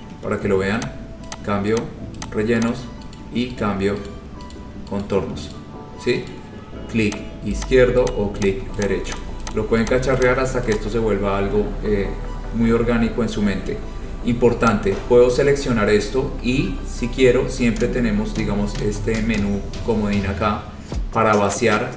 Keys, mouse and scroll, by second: 1.0 click, 1.5 click, 2.0 click, 2.4 click, 2.8 click, 3.3 right click, 3.7 right click, 4.2 right click, 4.7 right click, 5.2 right click, 5.7 right click, 6.4 right click, 7.3 click, 7.8 click, 8.2 click, 8.6 click, 9.0 click, 9.3 click, 9.6 click, 10.0 click, 10.4 click, 10.9 click, 11.8-12.7 scroll, 14.9 click, 15.9 scroll down 4, 21.7 click.